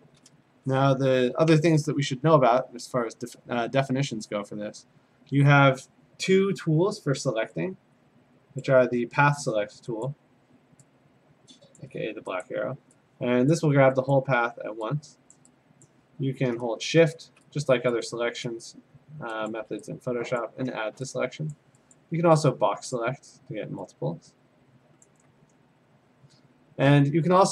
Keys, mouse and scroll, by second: 8.6 click, 10.1 click, 11.8 click, 12.4 click, 13.5 click, 14.1 click, 15.3 click, 16.4 click, 17.1 shift+click, 17.9 click, 19.5 shift+click, 20.4 click, 21.5 click, 22.0 click, 23.0 click, 25.1 click.